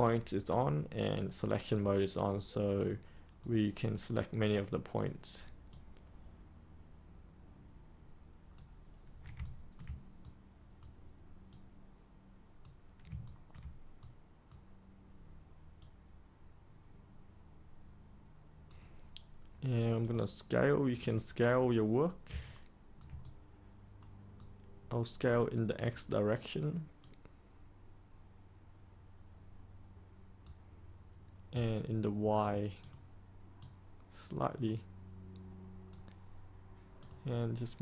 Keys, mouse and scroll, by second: 3.3-4.8 right drag, 4.9-8.8 drag, 9.4 ctrl+right click, 11.4-12.9 drag, 13.2 ctrl+right click, 13.9 right click, 15.7-20.9 drag, 22.4 ctrl+right click, 23.1-25.1 right drag, 25.8-37.8 drag.